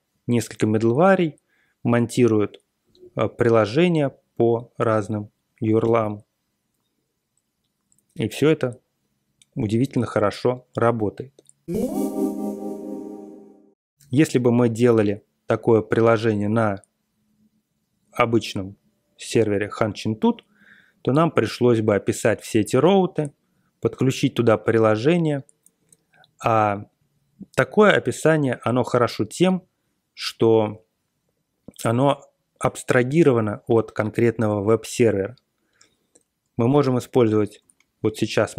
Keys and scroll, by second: 37.5 super+Tab.